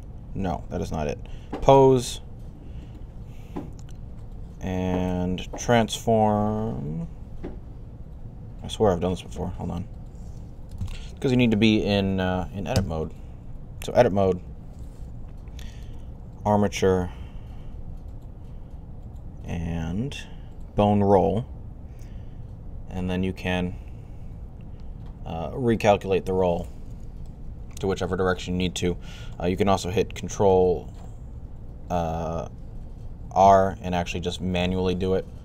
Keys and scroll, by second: 10.7 Escape, 30.4 ctrl+n, 32.7 ctrl+r.